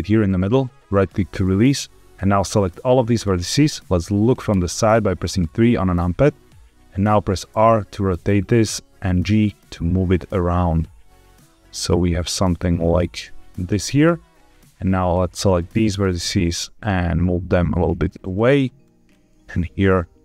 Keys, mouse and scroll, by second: 0.2 right click, 1.8-2.8 drag, 4.4 KP_3, 7.4 r, 8.3 click, 8.7 g, 13.5 click, 14.4-15.5 drag, 15.8 g, 18.1 click, 18.7 click, 19.2 g.